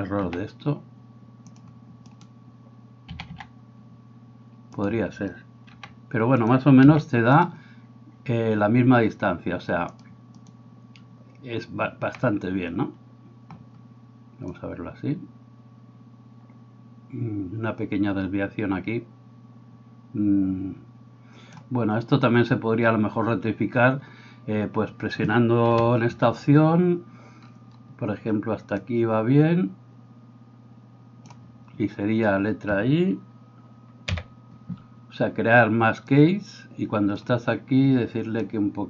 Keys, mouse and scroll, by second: 0.3 s, 1.6-10.1 middle drag, 2.1 right click, 3.1 a, 3.3 a, 5.7 r, 6.8 s, 10.1-38.8 drag, 25.8 KP_7, 36.2 i.